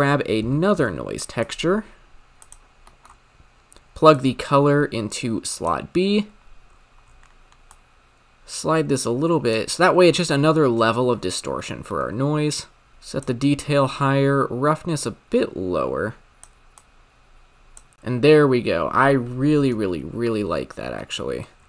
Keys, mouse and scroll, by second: 2.9 middle click, 3.1-4.1 scroll up 4, 4.1-4.8 drag, 6.7-7.0 scroll down 3, 7.1-7.7 scroll up 4, 7.7-10.8 drag, 11.9 middle click, 12.1-12.9 scroll up 2, 12.9-17.8 drag, 17.8 space, 19.6 space, 20.9-21.5 middle drag, 21.5 scroll up 6.